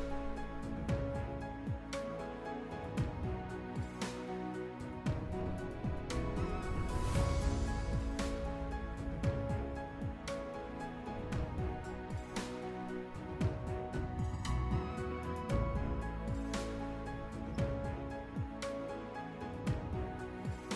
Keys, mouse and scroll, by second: 16.9-17.9 alt+right drag.